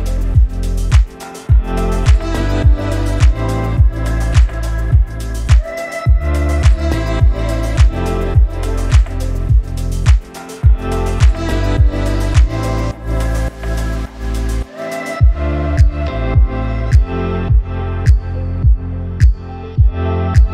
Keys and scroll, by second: 0.1 a.